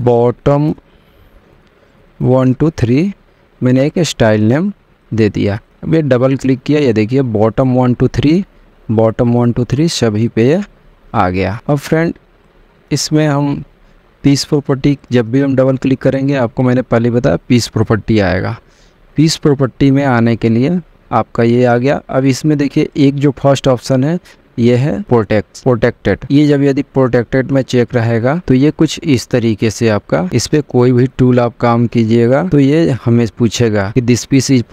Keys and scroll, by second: 0.0-3.4 typing, 31.8 m.